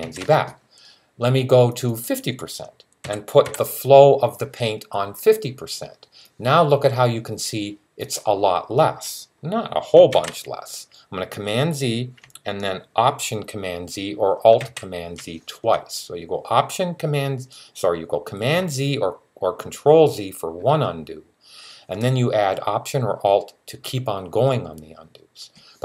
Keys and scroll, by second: 2.9-3.2 typing, 10.0 super+z, 14.4 z.